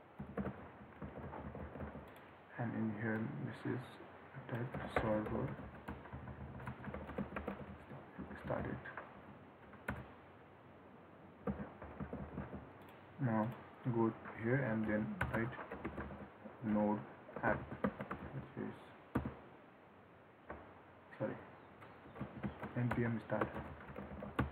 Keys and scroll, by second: 1.2 ctrl+s, 12.2 ctrl+s.